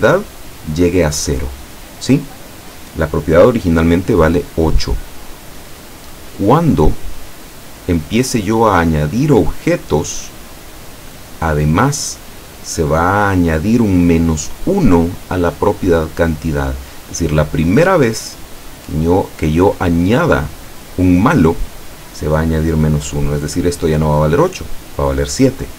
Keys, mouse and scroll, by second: 5.9-7.2 middle drag, 8.9 click, 11.3-12.2 middle drag.